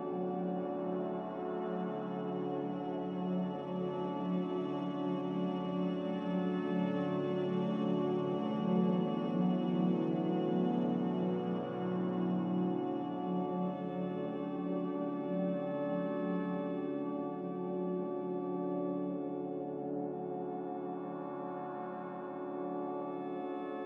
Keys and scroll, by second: 2.7 ctrl+z, 3.2 ctrl+z, 7.0 g, 8.7 Escape, 8.8 Escape, 9.2 z, 15.2 g, 16.0 x, 18.3 z.